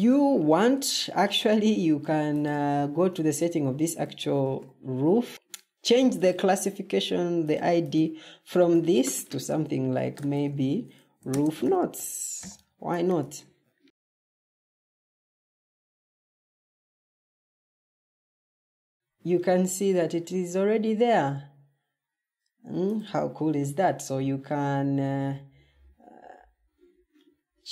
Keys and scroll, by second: 0.9 Escape, 4.3 ctrl+t, 9.6-12.3 typing, 14.1-14.9 typing, 20.2 Escape.